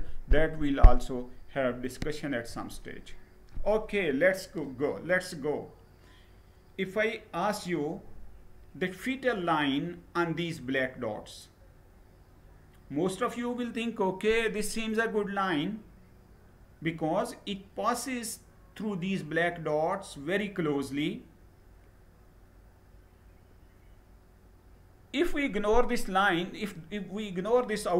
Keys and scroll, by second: 2.0 Down.